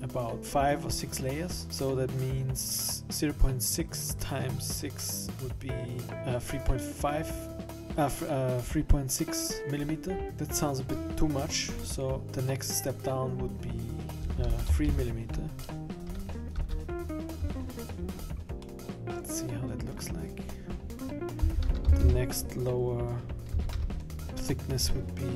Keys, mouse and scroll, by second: 13.6 click, 14.9 0, 18.1-18.6 scroll up 6, 18.8 middle click, 21.2 click, 22.0 0.